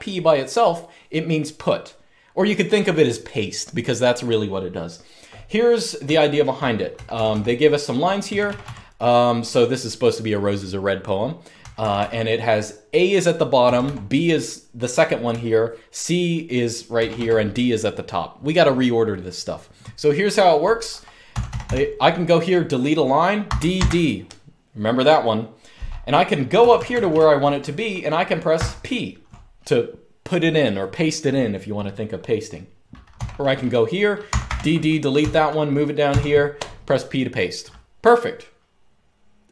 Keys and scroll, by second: 5.7-6.8 typing, 7.9-8.3 typing, 11.3-11.7 typing, 13.3 typing, 15.0 typing, 16.6 typing, 21.0-21.3 typing, 23.1-23.4 typing, 26.3-26.8 typing, 28.2 typing, 32.8 typing, 34.0-35.8 typing.